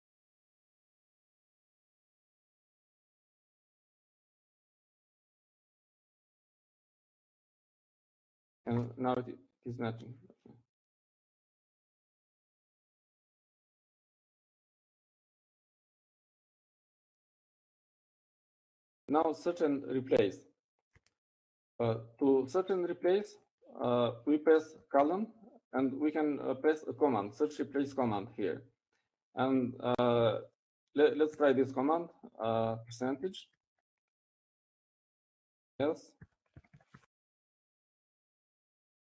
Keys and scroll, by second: 0.0 typing, 0.6 Left, 4.7-7.0 typing, 6.0 Right, 8.0 Left, 8.1 Left, 8.5 Left, 8.6 Left, 10.0 shift+l, 10.1 Right, 10.6 Right, 11.5 Right, 27.5 shift+;, 34.5 shift+5, 38.0-39.0 typing.